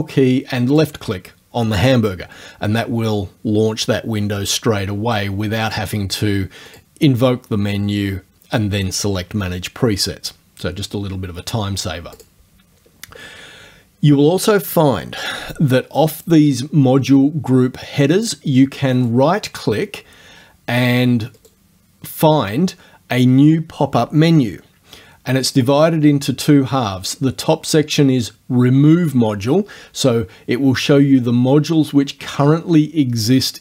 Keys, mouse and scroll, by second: 0.8 ctrl+click, 5.7 click, 6.8 click, 12.2 click, 19.0 right click, 21.4 right click.